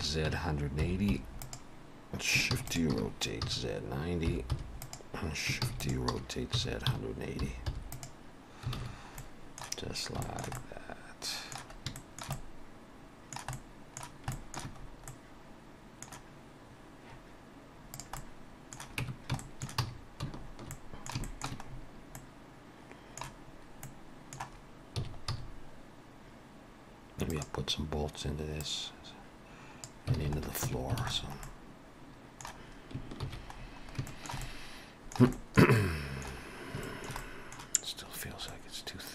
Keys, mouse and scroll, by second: 2.6 shift+d, 2.9 r, 5.7 shift+d, 6.1 r, 8.8 alt+a, 8.9-9.2 scroll down 3, 9.2 middle click, 9.9-10.2 scroll up 2, 10.2 shift+middle click, 10.6 middle click, 12.0 shift+middle click, 12.4 middle click, 13.5 middle click, 13.6 shift+middle click, 14.3 shift+middle click, 14.8 scroll up 2, 15.0 middle click, 17.9 click, 18.2 middle click, 19.0 Tab, 19.4 shift+middle click, 19.8 a, 20.3-20.7 shift+scroll up 2, 20.7 middle click, 21.2 shift+middle click, 21.6-22.8 scroll up 3, 22.2 middle click, 23.5 scroll up 1, 23.9 middle click, 25.0 s, 28.6 click, 30.2 alt+a, 30.4 scroll down 1, 30.6 Tab, 31.0 alt+a, 31.1-31.5 scroll down 3, 31.4 middle click, 33.3 ctrl+s, 33.6-34.1 scroll down 2, 34.1 shift+middle click, 34.4 middle click, 35.4 shift+middle click, 35.8 middle click, 36.5-36.8 scroll up 2, 36.8 shift+middle click, 37.2 middle click, 38.5 middle click, 38.8 shift+middle click.